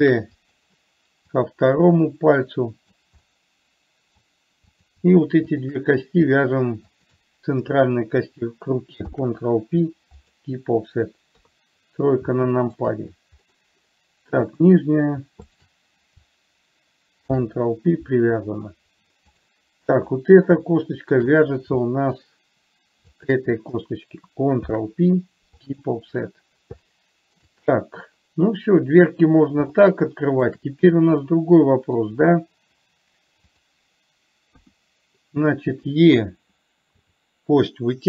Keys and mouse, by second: 0.4 shift+d, 1.7-3.2 drag, 3.7 middle click, 7.2 shift+click, 9.4 ctrl+p, 11.7 KP_3, 12.7 middle click, 14.9 click, 15.7 shift+click, 17.6 ctrl+p, 19.7 click, 21.0 shift+middle click, 22.1 shift+middle click, 23.4 shift+click, 25.0 ctrl+p, 27.2 middle click, 30.1 shift+middle click, 31.6 middle click, 35.0 KP_1, 37.4 e.